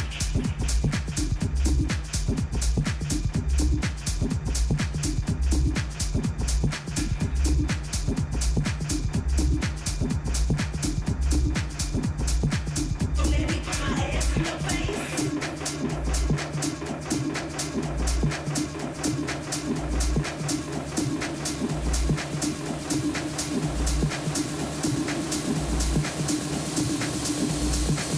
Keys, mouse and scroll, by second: 3.5-10.0 drag, 10.0-13.6 middle drag, 11.5 Tab, 12.3 Tab, 14.1 a, 17.9-23.5 middle drag, 20.2-22.0 right drag, 25.1-27.0 middle drag, 25.6 Tab, 26.4 Tab, 27.0 a, 27.5 a, 27.8 a.